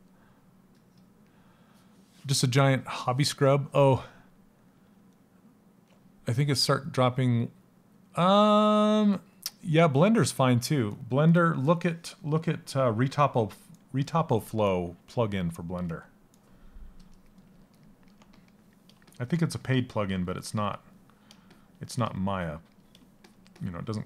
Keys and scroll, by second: 12.7 s.